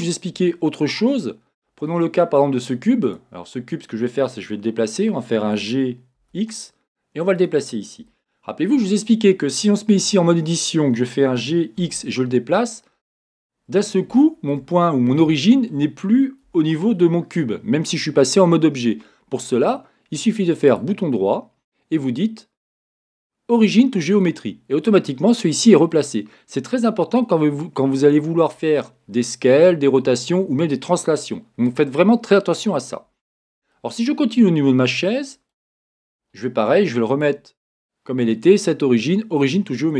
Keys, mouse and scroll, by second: 3.2 click, 3.5-4.0 scroll down 1, 5.6 g, 7.5 click, 8.1-12.7 shift+middle drag, 8.9 scroll, 9.9 Tab, 11.3 g, 12.7 click, 12.9 scroll, 14.2-15.4 shift+middle drag, 14.7 scroll up 1, 15.3 scroll up 1, 15.4 shift+right click, 15.7-24.2 shift+middle drag, 20.0 Tab, 24.2 right click, 24.8-37.2 middle drag, 26.4-27.2 scroll up 1, 37.2 click.